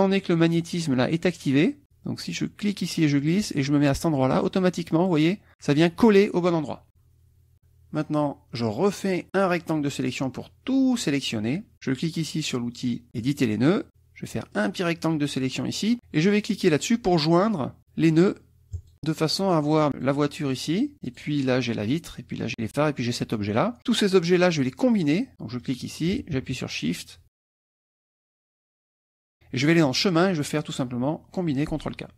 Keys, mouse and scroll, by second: 2.6-5.9 drag, 9.3-11.2 drag, 13.2 click, 14.5-15.9 drag, 18.8 click, 19.4 click, 19.9 click, 20.4 click, 21.1 click, 22.5 click, 23.1 click, 23.8 click, 25.6 click, 26.8 shift+click, 27.4 shift+click, 27.8 shift+click, 29.7 click.